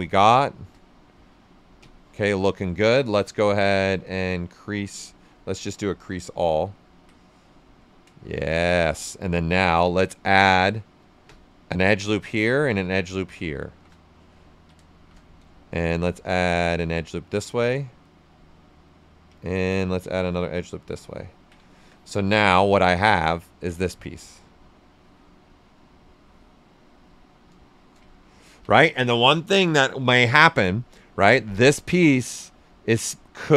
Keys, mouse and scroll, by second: 0.7 right click, 1.7 space, 2.8 click, 3.3 space, 6.2 click, 6.7 ctrl+right click, 7.7 right click, 8.2 shift+f, 8.5 right click, 9.6 space, 10.3 click, 10.8 space, 10.9 click, 11.1 space, 11.7-13.6 drag, 13.6 shift+f, 14.4 ctrl+right click, 14.9 shift+f, 15.1-16.9 shift+right drag, 16.9 click, 18.0 right click, 20.2-21.6 drag, 21.6 ctrl+right click, 22.3 click, 23.2-28.0 ctrl+right drag, 28.0-31.0 ctrl+right drag, 31.0-33.1 ctrl+right drag, 33.1-33.5 right drag.